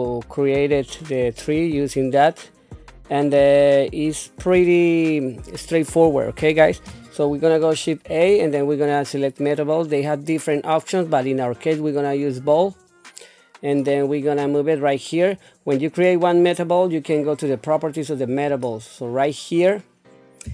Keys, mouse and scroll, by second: 14.4 click, 14.7 click, 18.3 click.